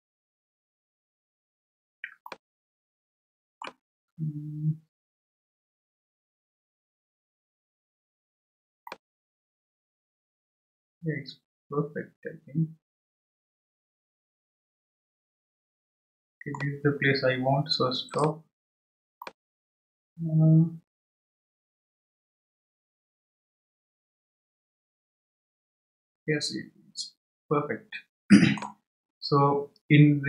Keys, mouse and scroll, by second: 0.4-2.1 scroll up 1, 4.6-5.8 shift+middle drag, 9.3-12.4 middle drag, 18.3-19.2 drag, 19.2-22.2 middle drag.